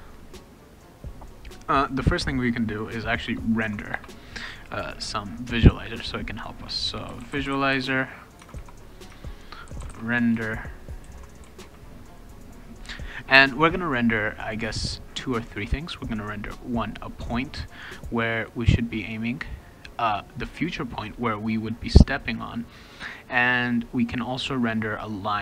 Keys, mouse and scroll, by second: 3.2 Return, 3.9 Return, 6.8-12.1 typing, 8.4 Tab, 8.4 Caps_Lock, 9.1 Caps_Lock.